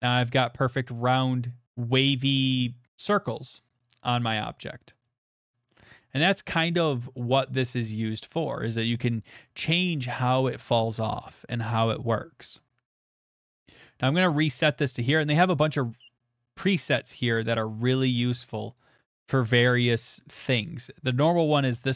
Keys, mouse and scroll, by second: 3.7 middle click, 4.1 middle click, 5.0 click, 6.4 middle click, 7.3 middle click, 7.3 middle click, 7.3 middle click, 8.4 middle click, 14.4 click, 15.8 click, 16.7 click, 17.3 click, 18.5 click, 18.8 click, 20.0 click.